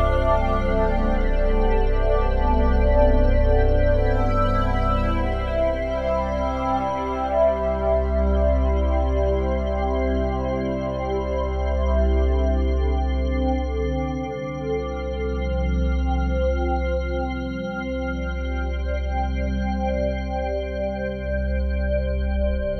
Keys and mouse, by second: 8.4 s, 19.1-22.7 drag.